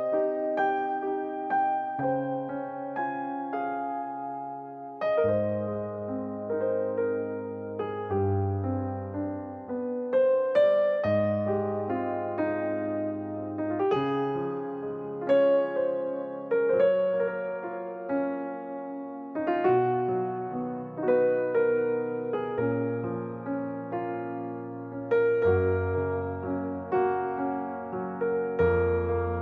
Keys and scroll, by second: 0.5 ctrl+c, 17.6 e, 21.4 3, 21.6 Return, 22.1 space, 24.4 m, 26.6-27.4 typing.